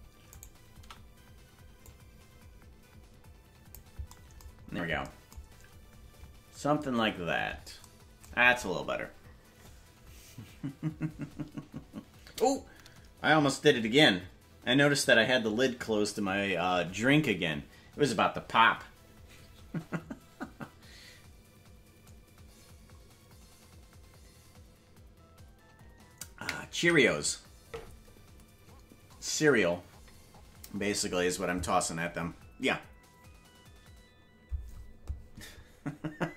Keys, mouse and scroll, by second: 1.8-3.7 drag, 1.8 shift+right click, 4.5-6.8 scroll down 4.